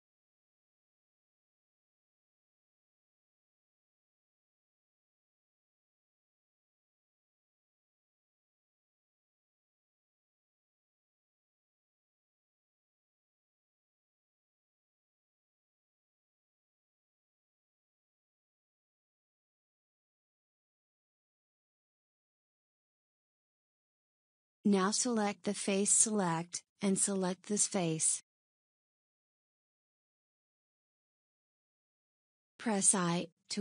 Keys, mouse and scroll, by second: 0.7-3.4 shift+middle drag, 3.4 ctrl+r, 7.3-9.0 middle drag, 9.0 ctrl+r, 19.8 Tab, 20.8 Tab, 25.0 click, 26.6 click.